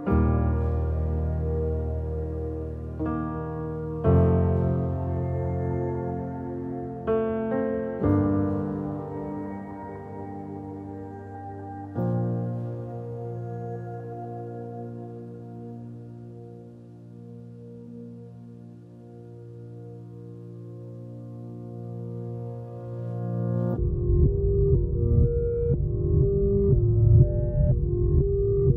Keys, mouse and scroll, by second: 4.2 click, 7.9 alt+a, 10.8 alt+a, 11.1 click, 11.3 Tab, 13.7 alt+z, 16.7 click, 17.0 Tab, 17.4 alt+a, 18.0 click, 21.2 click, 21.5 middle click, 21.9 click, 22.4 s, 23.0 click, 23.7 KP_0, 26.9 click, 28.0 alt+a, 28.5 click.